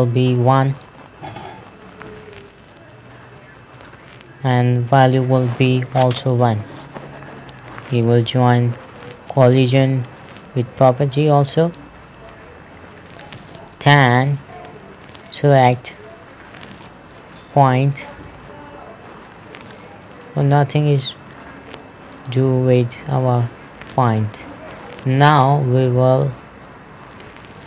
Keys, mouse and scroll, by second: 5.5 click, 6.8 KP_1, 7.0 Return, 10.3 click, 16.2 right click, 17.3 scroll up 1, 17.7 scroll down 1, 18.2-18.6 scroll up 1, 20.1 middle click, 22.7 right click, 25.6 click.